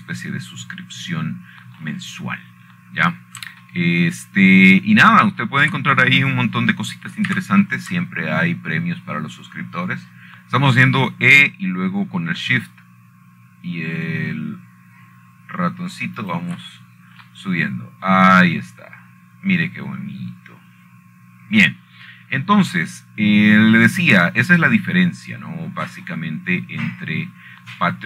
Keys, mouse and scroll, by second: 0.8 Escape, 1.1-2.1 scroll down 4, 4.6 middle click, 5.0-6.1 scroll up 1, 6.1 shift+scroll up 1, 8.2-9.5 shift+middle drag, 10.0 e, 18.9 shift+click, 19.5-20.0 scroll down 2, 24.7-25.9 scroll down 1, 27.8-28.0 scroll up 7.